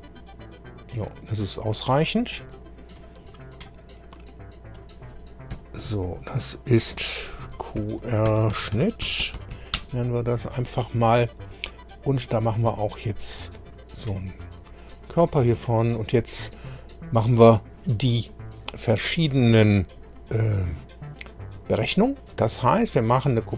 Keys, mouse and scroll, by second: 3.0 click, 4.7 click, 5.5 F2, 7.4-10.0 typing, 13.2 click, 14.9 scroll down 1, 22.6 click.